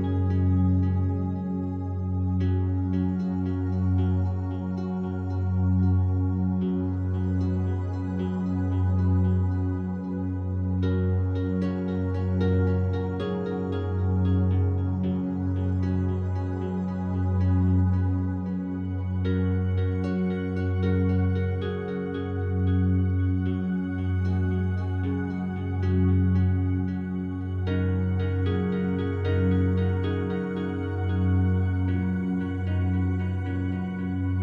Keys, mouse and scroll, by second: 3.0 ctrl+z, 9.3-16.1 alt+drag, 16.1 e, 21.7 click, 22.0 s, 26.2 click, 26.5 a, 26.7 a, 27.3-29.6 alt+drag, 29.6 ctrl+r, 30.4 click, 31.0 right click, 33.1 shift+right click.